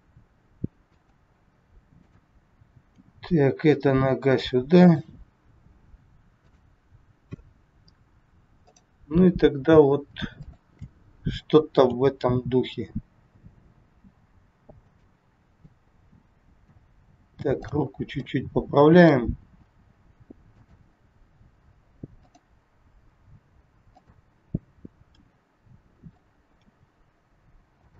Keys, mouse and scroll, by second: 2.0 click, 2.8 g, 6.4 click, 7.5 scroll up 2, 8.6 scroll up 1, 8.7 click, 10.4 shift+click, 11.9 g, 15.7 middle click, 17.6 click, 18.2 middle click, 19.4 g, 22.2 click, 22.8 g, 25.1 r, 26.5 g.